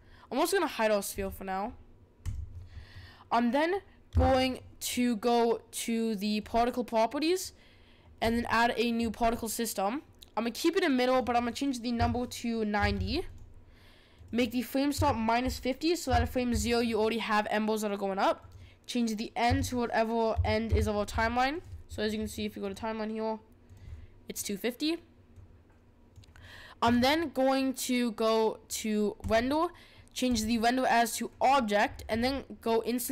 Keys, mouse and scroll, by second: 1.1 click, 2.2 click, 4.1 s, 6.4 click, 8.2-13.3 drag, 14.1-16.9 drag, 18.4-21.5 drag, 22.6-28.4 drag, 29.2-31.8 drag, 31.8-32.3 scroll down 11.